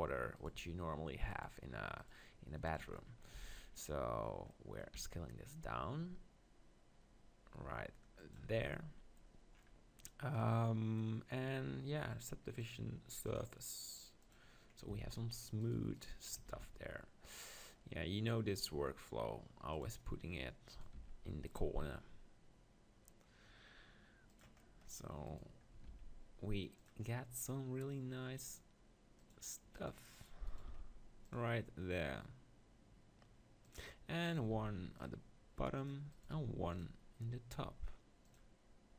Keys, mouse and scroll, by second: 0.4-3.1 right drag, 3.1-6.5 middle drag, 3.4 z, 4.9 e, 8.3-10.2 drag, 8.5 Tab, 10.2-13.5 middle drag, 13.5-15.1 drag, 14.9 Tab, 15.1 middle click, 15.6-17.8 right drag, 16.2 click, 16.5 ctrl+r, 17.8 middle click, 19.8-22.5 right drag, 20.7 click, 21.0 ctrl+r, 24.4-27.0 right drag, 24.6-26.7 drag, 25.9 ctrl+r, 27.0-28.9 middle drag, 29.3-31.3 drag, 29.7-31.2 right drag, 30.7 ctrl+r, 31.3-32.4 right drag, 33.7-35.7 drag, 34.3-37.9 right drag, 34.6 ctrl+r, 36.3 ctrl+r, 38.4-38.9 drag.